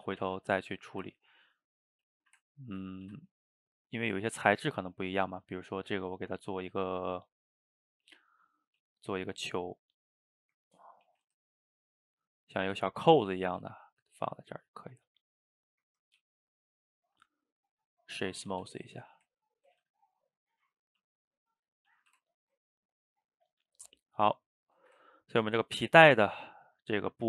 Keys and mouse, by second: 0.1 a, 0.2 a, 0.4-0.9 middle drag, 0.9 shift+right click, 1.2-1.8 ctrl+middle drag, 1.8 drag, 2.2-2.9 shift+middle drag, 2.9 shift+right click, 3.1 shift+a, 10.2-11.1 middle drag, 11.1 s, 12.8 s, 13.5 r, 14.3 g, 14.8-16.2 middle drag, 16.2 g, 17.0-18.5 right drag, 18.5 a, 18.7 a, 19.0 click, 19.3-19.8 ctrl+middle drag, 19.8 a, 19.9 a, 20.7 drag, 21.0 s, 21.8 middle click, 21.9 a, 22.1 a, 22.2-27.2 ctrl+middle drag.